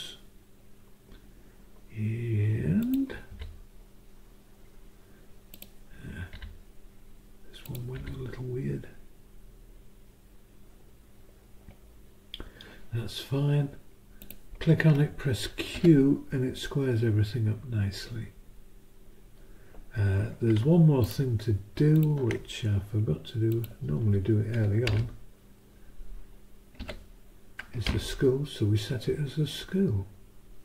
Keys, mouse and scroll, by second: 2.8 click, 3.3 Delete, 5.5 click, 6.3 Delete, 7.6 click, 8.0 Delete, 14.2 click, 15.7 q, 17.3-18.4 drag, 21.0 ctrl+click, 21.9 ctrl+click, 23.5 click, 24.9 Return, 26.8 s.